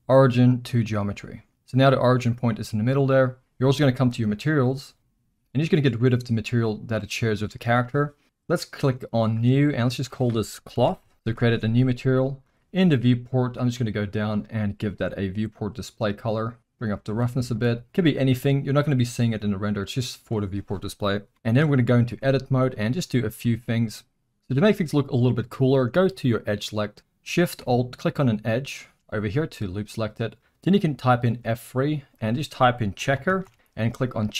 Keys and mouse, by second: 7.4 click, 9.2 drag, 9.9-11.1 drag, 12.5 click, 13.8 click, 14.8 click, 16.6 click, 17.5 click, 20.9 middle click, 21.7 Tab, 22.3 middle click, 22.8 shift+middle drag, 23.4-23.8 middle drag, 23.9 middle click, 24.1 alt+a, 24.5-25.5 middle drag, 26.4 click, 28.5 shift+click, 31.3 F3.